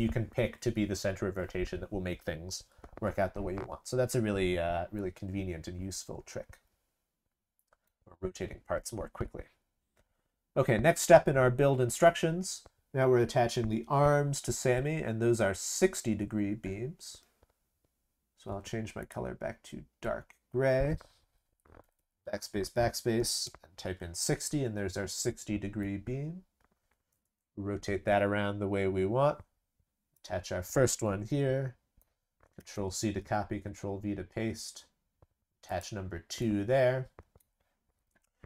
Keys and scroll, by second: 32.6 ctrl+c, 33.2 ctrl+v.